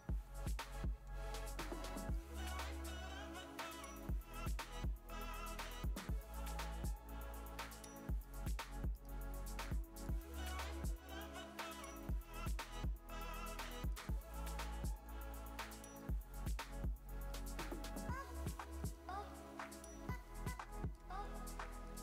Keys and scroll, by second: 0.0-1.9 typing, 3.0 typing, 5.1 /, 7.8 i, 8.7 v, 9.9 space, 10.4 super+space, 12.0 a, 18.3 v, 18.4 space, 19.0 alt+super+space, 19.6-22.0 typing, 20.2 alt+super+space, 21.8 super+space.